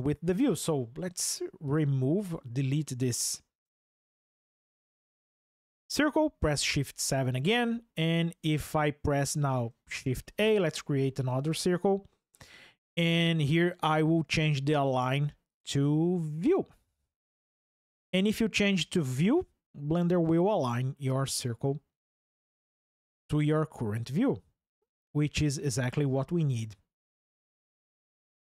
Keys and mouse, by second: 0.9 x, 2.0 click, 3.4 Tab, 6.4 shift+KP_7, 8.3 Tab, 9.7 shift+a, 15.2 click, 26.3 shift+middle drag.